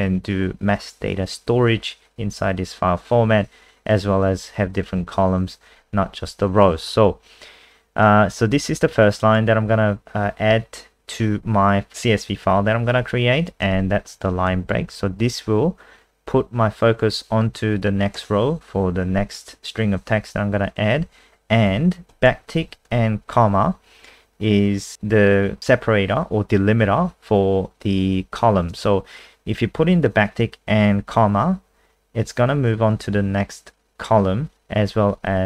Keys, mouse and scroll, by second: 8.0 click, 14.0 Right, 14.5 shift+Right, 14.7 shift+Right, 21.0 Right, 22.1 Left, 22.4 shift+Right, 22.7 shift+Right.